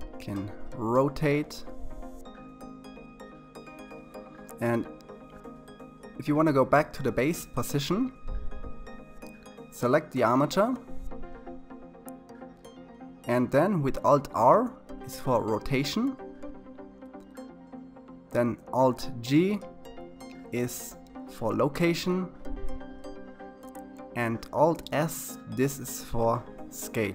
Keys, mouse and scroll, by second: 0.8-1.2 scroll down 3, 2.7 r, 6.9 a, 12.7 alt+r, 17.8 alt+g, 23.2 alt+s, 26.6 KP_3.